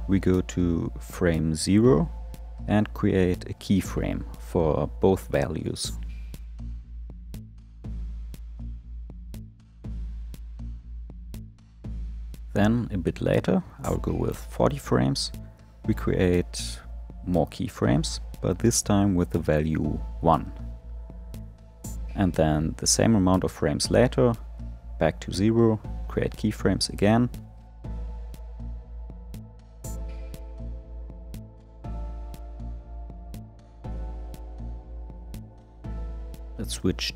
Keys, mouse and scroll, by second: 2.1-5.4 drag, 7.3 i, 8.3 i, 13.8-18.4 drag, 19.0-20.0 drag, 21.8-25.0 drag, 25.5-26.8 drag, 28.9-30.2 drag, 32.8 click, 35.6-37.1 drag.